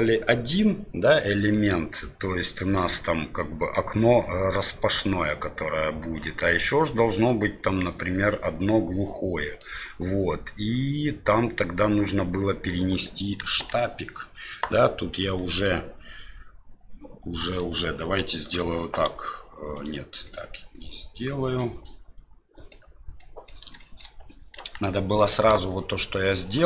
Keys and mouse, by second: 1.5-2.5 middle drag, 7.8-9.6 middle drag, 13.4 KP_1, 15.3-17.6 middle drag, 18.5 ctrl+r, 20.2-22.7 middle drag, 23.1 middle click, 23.8 shift+middle click, 24.5 KP_1.